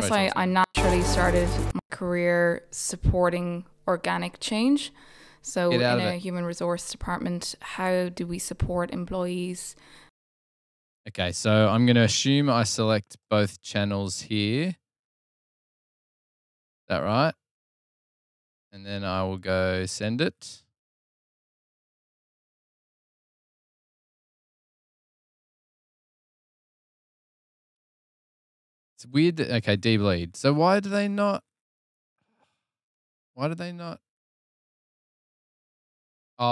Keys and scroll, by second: 0.4 space, 3.0 super+Tab, 3.3 super+Tab, 11.8 super+], 11.9 super+].